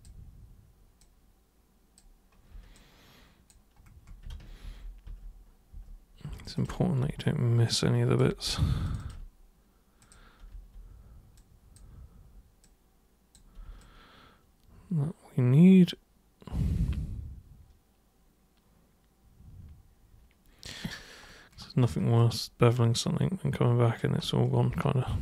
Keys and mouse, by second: 1.0 super+click, 2.7 alt+super+click, 4.3 ctrl+super+z, 4.7 ctrl+super+z, 5.1 ctrl+super+z, 5.7 ctrl+super+z, 6.5 ctrl+shift+super+click, 7.2-8.2 alt+super+drag, 8.8 ctrl+shift+super+click, 10.0 super+click, 11.3 super+click, 12.6 super+click, 13.8-20.6 alt+super+drag, 22.2-24.0 alt+super+drag.